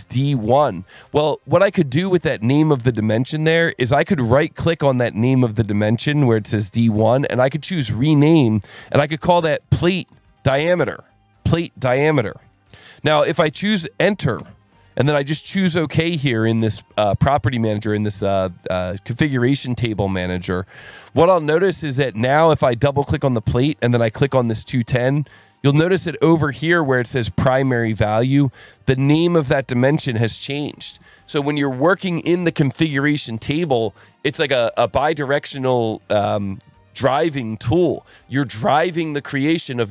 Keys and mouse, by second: 3.1 right click, 4.6 right click, 5.6 click, 7.3 click, 8.9-11.0 typing, 14.4 KP_Enter, 20.9 click, 21.5 click, 22.9 click, 24.3 click, 25.6 alt+1, 27.2 click, 28.2 click.